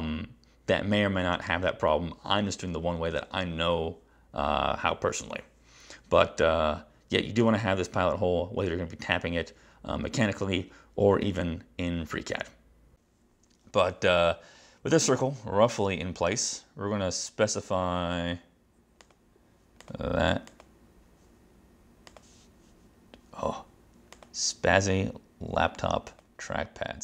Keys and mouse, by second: 19.1 right click, 19.9 click, 20.4 click, 22.2 click, 24.3 click, 26.2 click.